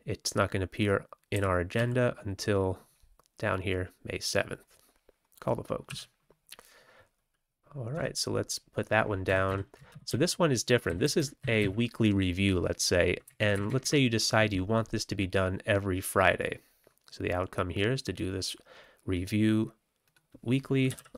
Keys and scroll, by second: 1.3 f, 1.7 w, 5.8 q, 7.9 Tab, 9.2 Down, 9.4 Left, 9.8 ctrl+x, 10.0 ctrl+s, 10.8 Down, 10.9 Down, 11.1 Down, 11.3 Down, 11.5 Down, 13.2 Up, 13.5 Up, 13.6 Up, 13.7 Up, 20.6-21.1 typing.